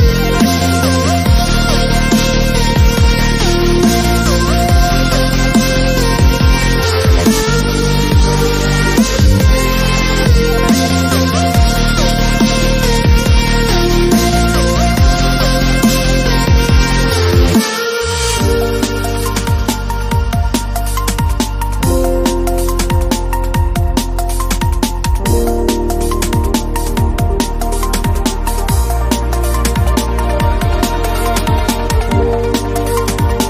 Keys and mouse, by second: 0.1 ctrl+r, 1.0 ctrl+r, 1.5 ctrl+z, 1.6 ctrl+r, 2.6 middle click, 3.3 ctrl+Tab, 3.8 a, 4.0 b, 4.5 ctrl+z, 4.8 b, 6.2-8.6 typing, 9.7-12.6 typing, 13.1 middle click, 14.0 z, 14.0 b, 14.5 r, 15.4 g, 15.6 click, 17.1 z, 19.0-21.9 typing, 19.4 middle click, 19.7 click, 21.3 click, 21.6 middle click, 21.8 middle click, 22.4 click, 23.1-28.1 typing, 23.3 click, 30.4 e, 31.0 click, 31.2 s, 31.5 z, 32.1 a.